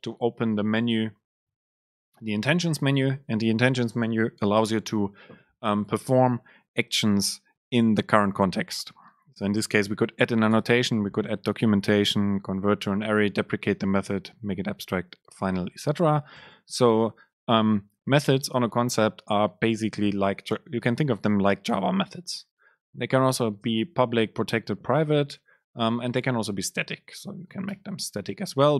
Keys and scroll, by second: 22.9 Left, 23.1 Left, 23.2 super+space.